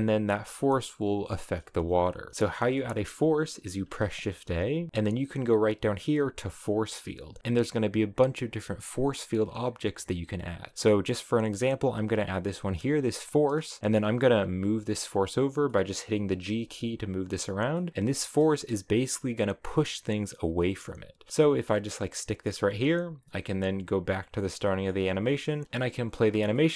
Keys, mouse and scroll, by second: 1.4-3.8 middle drag, 3.8 shift+a, 13.4-13.9 scroll down 4, 14.5 g, 15.8 middle click, 16.5 g, 17.4 scroll up 3, 17.8 middle click, 18.0-18.3 scroll down 1, 18.3-21.3 middle drag, 21.3 g, 24.0 click, 24.7 middle click, 25.3 space, 26.2 scroll down 1, 26.6 middle click.